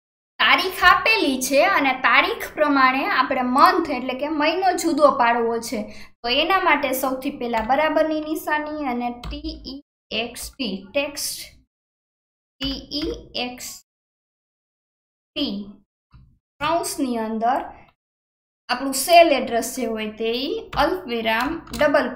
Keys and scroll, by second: 16.1 alt+KP_1, 16.6 shift+9, 21.4 shift+9, 21.7 shift+'.